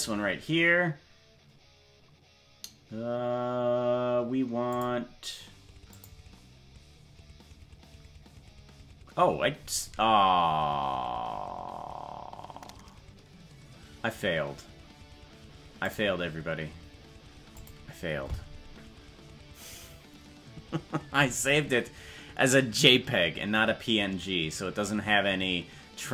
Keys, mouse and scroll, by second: 4.7 click, 5.9 click.